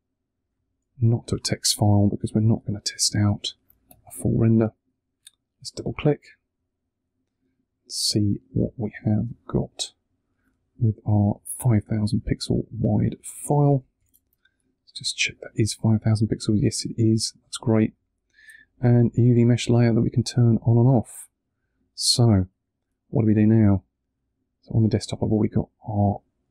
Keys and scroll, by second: 13.9 alt+super+i.